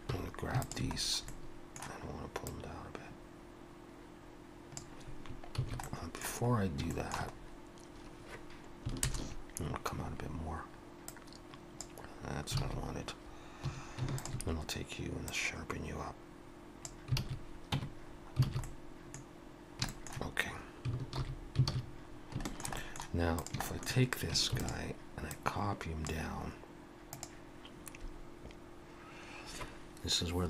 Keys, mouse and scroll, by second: 0.1 3, 0.6 alt+shift+click, 1.0-1.5 scroll down 2, 1.3 middle click, 2.5 click, 5.7 ctrl+z, 5.8 middle click, 6.9 shift+middle click, 7.3-8.6 scroll up 2, 9.0 ctrl+KP_Add, 11.1 click, 12.1 click, 12.6 alt+a, 13.7 2, 14.2 alt+shift+click, 15.3 click, 17.2 alt+a, 17.8 Tab, 18.1-18.5 scroll down 2, 18.5 alt+a, 18.6 middle click, 19.5-19.9 scroll down 2, 19.9 shift+middle click, 21.2 alt+h, 21.7 alt+a, 22.1 scroll down 2, 22.5 shift+middle click, 22.8 middle click, 23.4 click, 23.7 shift+middle click, 24.6 shift+d, 25.3 click.